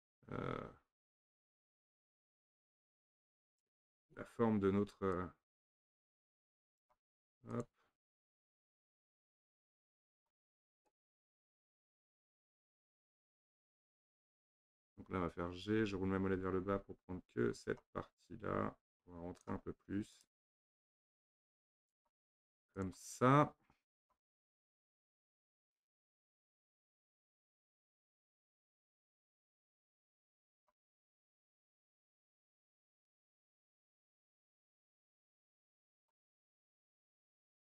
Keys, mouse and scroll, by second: 0.7 shift+z, 1.5 shift+z, 2.5-3.5 scroll up 2, 3.5 click, 5.1 click, 7.5 click, 8.3 click, 10.9 click, 11.9 click, 15.6 g, 20.1 click, 20.7 g, 22.8 click, 24.0 click, 24.5 g, 27.1 click, 27.4 g, 28.9 click, 29.3 g, 32.7 click, 33.5 g, 36.6 click, 36.9 g.